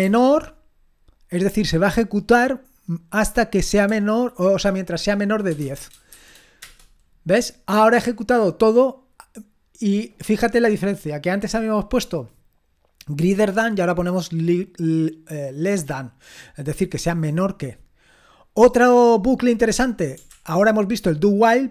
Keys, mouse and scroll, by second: 0.0-0.5 typing, 5.2-6.6 typing, 18.0-20.2 scroll down 1, 20.2 scroll down 1, 20.3 ctrl+l.